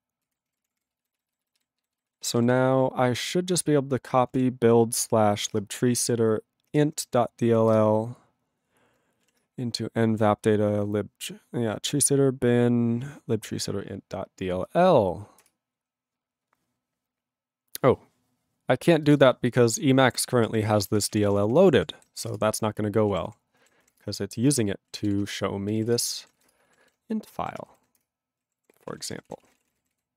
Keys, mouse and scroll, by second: 19.8 click, 19.8 click, 20.8 ctrl+g, 20.9 ctrl+p, 21.1 ctrl+e, 21.2 ctrl+p, 21.3 ctrl+e, 21.4 ctrl+p, 22.4 Return, 23.1 ctrl+a, 23.2 ctrl+p, 24.0 Return, 26.0 ctrl+Return, 26.5 Return, 28.1 ctrl+Return, 28.5 ctrl+=, 28.9 ctrl+a, 28.9 ctrl+p, 29.0 ctrl+space, 29.2 ctrl+n, 29.3 ctrl+e, 29.5 ctrl+n, 29.6 ctrl+e, 29.7 ctrl+n, 29.9 ctrl+g.